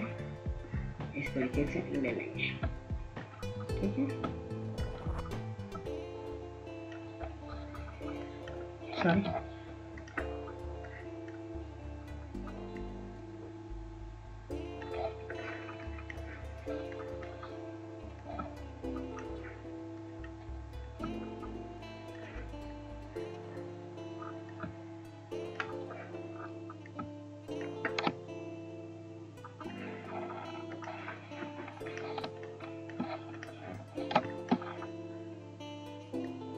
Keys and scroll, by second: 7.8 ctrl+z.